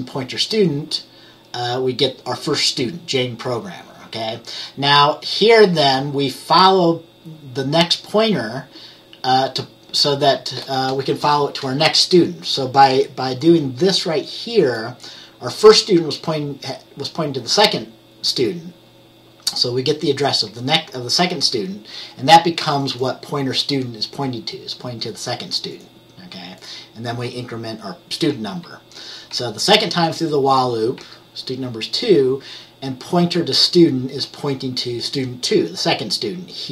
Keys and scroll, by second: 27.3 F10, 28.4 F10, 29.4 F10, 30.2 F10, 31.1 F10.